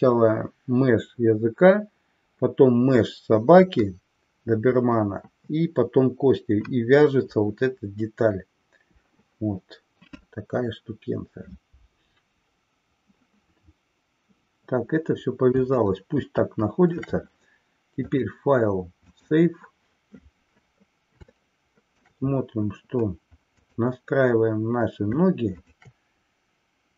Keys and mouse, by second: 15.8-17.1 shift+middle drag, 18.0-19.4 drag, 21.5-22.1 shift+middle drag, 23.5 click, 25.5-26.7 shift+drag.